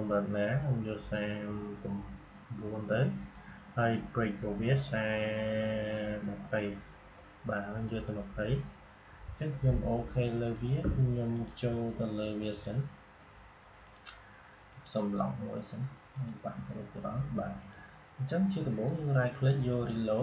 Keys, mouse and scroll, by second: 1.5-3.1 scroll up 1, 3.1 click, 4.6-6.4 scroll down 1, 7.7 click, 10.4 click, 18.6 right click, 19.6-20.2 drag.